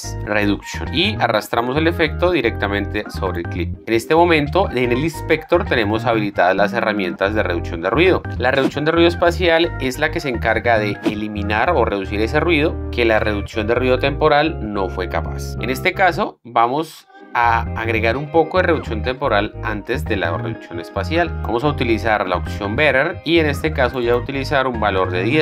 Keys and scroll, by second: 0.0-0.7 typing, 25.2 KP_1.